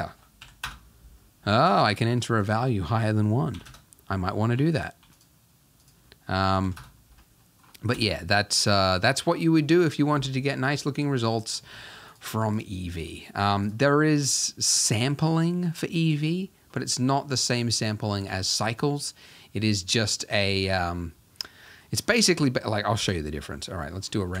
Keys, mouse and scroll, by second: 0.7 click, 1.4-3.7 scroll down 1, 3.7-5.2 drag, 6.8 click, 7.4-7.9 middle drag, 7.9 KP_0, 8.6-9.5 scroll down 3, 9.5-10.5 scroll down 1, 15.0-16.2 scroll up 6, 16.6-17.4 scroll down 1, 18.4-20.3 shift+middle drag, 20.3-21.1 scroll up 3, 21.7 middle click, 21.9-22.5 scroll up 3, 22.5 shift+middle click, 23.0 KP_0, 23.9 scroll down 3.